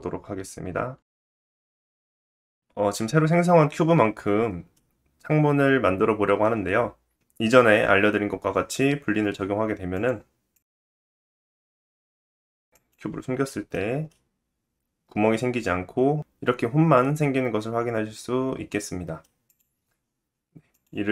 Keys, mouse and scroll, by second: 0.5 middle click, 0.9-8.0 drag, 1.0 t, 1.0 g, 1.5 middle click, 1.9 s, 4.7 shift+middle click, 9.9 click, 10.5-12.9 drag, 13.4 middle click, 14.1 middle click, 17.1-20.7 drag, 19.4 middle click, 20.7-21.1 middle drag.